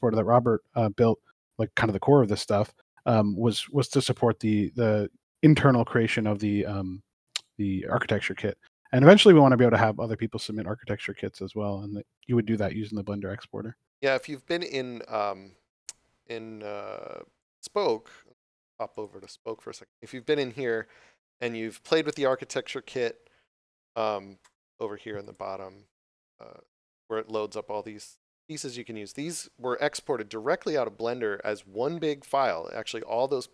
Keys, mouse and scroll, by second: 17.4 click, 23.1 scroll down 1, 25.1 click.